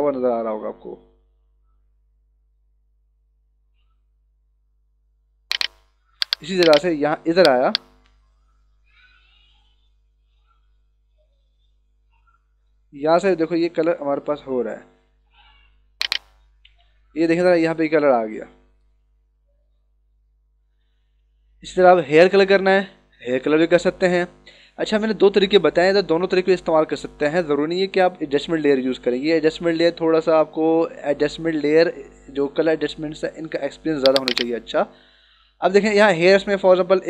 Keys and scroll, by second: 6.2 h, 7.4 e, 17.0 ctrl+-, 19.7 ctrl+-, 21.0 ctrl+=.